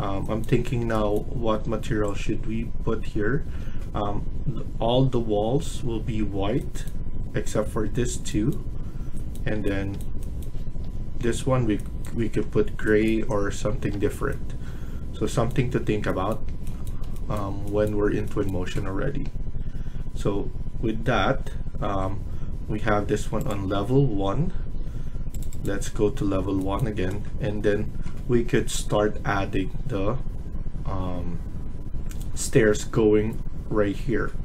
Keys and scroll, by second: 3.3 Escape, 24.5 Escape, 24.7 Escape.